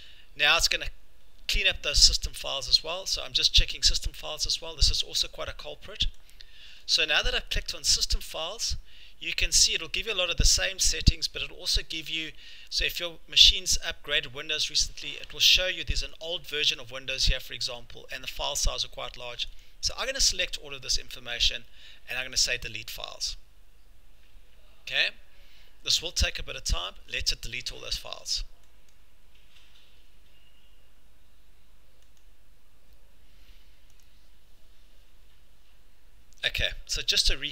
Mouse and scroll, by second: 32.2 click, 34.0 click.